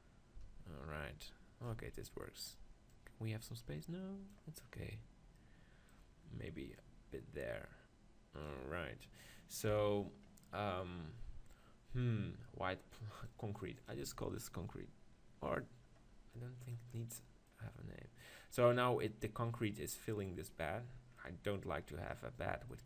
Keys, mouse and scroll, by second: 2.9-4.8 drag, 4.8-8.4 middle drag, 6.8 click, 7.4-8.4 right drag, 8.7-12.4 middle drag, 9.7 KP_7, 14.1-15.7 drag, 14.1-15.6 middle drag, 17.0-20.9 middle drag, 20.9 scroll down 1, 21.3-22.8 middle drag.